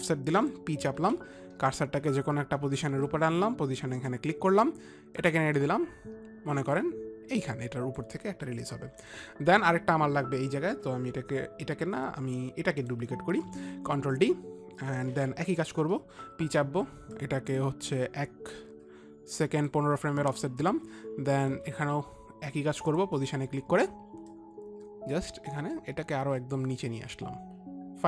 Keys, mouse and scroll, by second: 1.4 ctrl+d, 1.4 click, 1.5 p, 2.3 click, 2.3 p, 4.4 click, 5.6 click, 13.3 click, 14.0 ctrl+d, 14.0 click, 16.7 p, 17.7 click, 20.9 click, 21.2 shift+click, 23.4 shift+click, 24.8 shift+click.